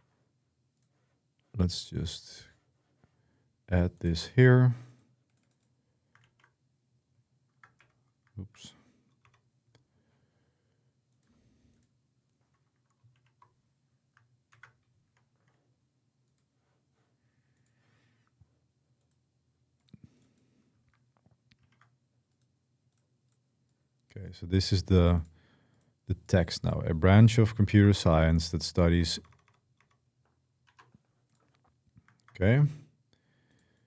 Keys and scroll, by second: 6.0 ctrl+v, 7.6 Escape, 9.0 BackSpace, 12.9 shift+v, 14.3 ctrl+c, 21.5 ctrl+v, 27.6-30.5 typing.